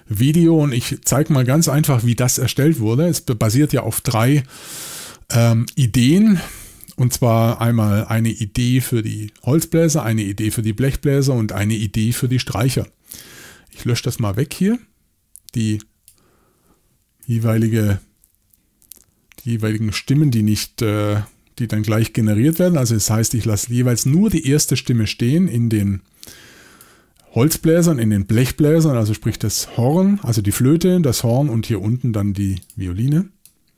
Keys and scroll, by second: 17.3 BackSpace, 21.2 BackSpace, 28.3 BackSpace.